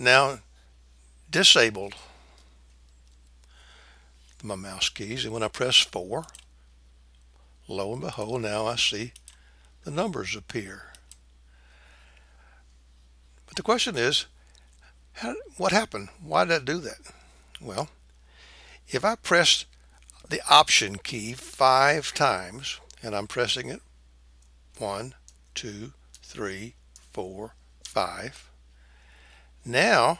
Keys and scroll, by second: 6.3 KP_4, 8.1 KP_2, 9.1 KP_1, 10.9 KP_3.